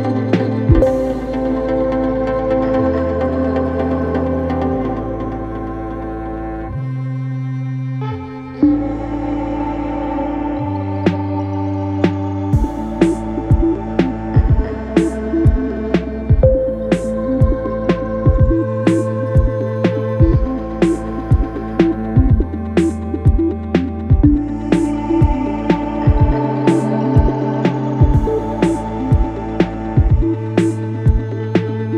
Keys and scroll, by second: 1.2 ctrl+z, 12.4 4, 15.3 3, 16.2 ], 18.2 ], 20.4 4, 22.6 3, 23.0 ], 24.2 ], 26.2 4.